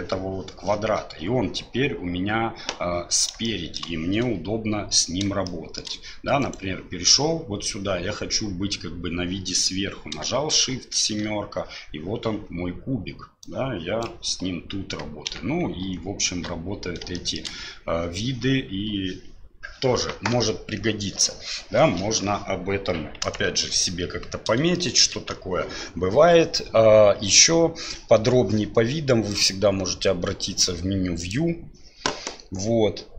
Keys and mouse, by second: 3.4 shift+click, 5.4 shift+click, 6.4 click, 10.6 shift+KP_7, 13.4 click, 15.2 shift+KP_3, 15.8 shift+KP_1, 17.1 shift+click, 23.2 KP_1, 24.7 shift+middle click, 29.3-30.6 drag, 31.2-33.1 drag.